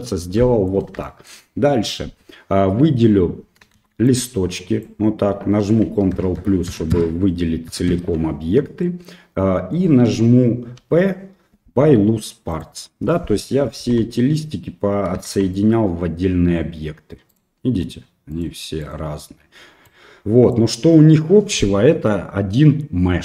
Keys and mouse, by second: 0.4 middle click, 1.0 shift+middle click, 3.8 shift+z, 4.1 click, 6.1 ctrl+KP_Add, 6.4 ctrl+KP_Add, 6.7 ctrl+KP_Add, 6.9 ctrl+KP_Add, 7.7 ctrl+KP_Add, 8.8 middle click, 10.8 p, 13.1 middle click, 14.0 Tab, 15.3 shift+z, 15.6-16.6 middle drag, 17.3-18.4 right drag, 18.8 right click, 19.8 click, 21.6 middle click.